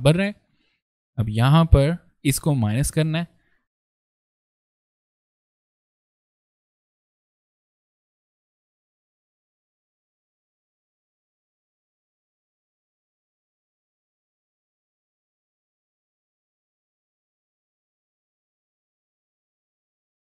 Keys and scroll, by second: 3.6 ctrl+z, 4.8 ctrl+shift+z, 5.3 ctrl+space, 5.5 ctrl+a, 6.2-8.6 typing, 6.8 ctrl+shift+c, 8.6 ctrl+space, 8.9 ctrl+a, 9.2 ctrl+z, 9.3 ctrl+a, 9.5 ctrl+z, 9.6 ctrl+v, 9.7 ctrl+a, 10.7 v, 10.7 ctrl+space, 11.5 alt+b, 11.7 alt+v, 11.7 alt+space, 12.4 space, 13.0 a, 13.7 ctrl+space, 13.7 ctrl+a, 14.8 shift+c, 15.2 a, 15.6 v, 15.6 ctrl+space, 16.0 ctrl+a, 16.3 ctrl+space, 16.8 ctrl+space, 17.6 ctrl+v, 18.0 ctrl+space, 18.2 ctrl+shift+c, 18.5 ctrl+v, 18.8 ctrl+z, 19.0 shift+c, 19.3 v, 19.4 ctrl+space, 19.5 ctrl+z, 19.8 ctrl+v, 20.0 ctrl+a.